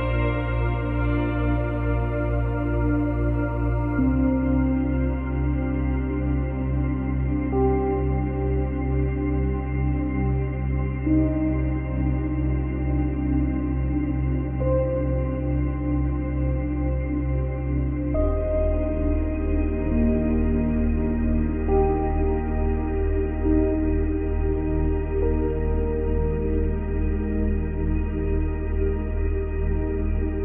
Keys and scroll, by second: 5.9 space, 7.8 space, 11.8 space, 14.1 space, 15.4 space, 19.5 space, 24.3 F9.